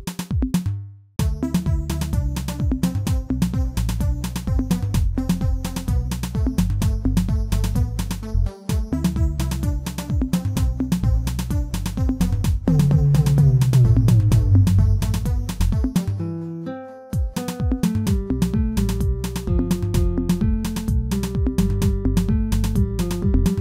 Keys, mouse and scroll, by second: 1.7 g, 4.1 e, 6.7 click, 7.2 shift+middle click, 7.9 i, 11.9-12.3 scroll up 2, 12.3 shift+middle click, 15.1 shift+middle click, 15.5 click, 15.9-17.3 middle drag, 22.2 2, 22.7 click.